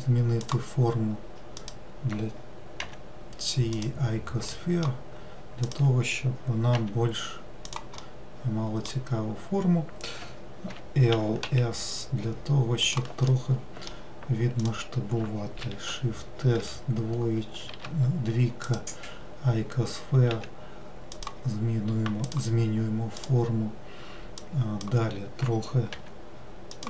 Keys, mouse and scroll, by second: 1.6 click, 4.6-5.7 middle drag, 5.7 click, 8.1-10.8 middle drag, 11.5 s, 13.3-14.6 middle drag, 14.6-15.8 drag, 15.8 shift+s, 22.3 click, 23.2 click.